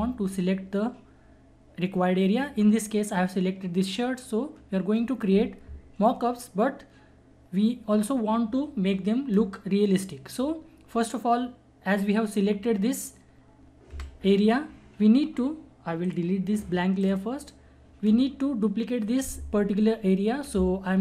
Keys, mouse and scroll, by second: 13.9 Delete, 16.0 click.